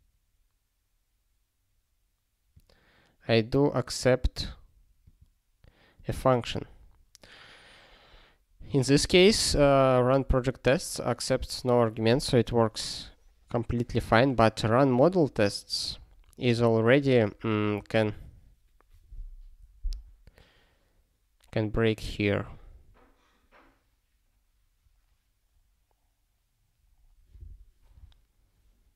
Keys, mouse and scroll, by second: 2.5 click, 4.3 click, 5.0 click, 5.9 click, 8.1-8.8 scroll up 1, 8.8 click, 9.9 scroll up 1, 13.5 scroll up 1, 15.0 click, 16.3 click, 16.5 double click, 17.2 click, 17.3 double click, 20.1 click, 22.2 scroll down 1, 24.8 scroll down 1.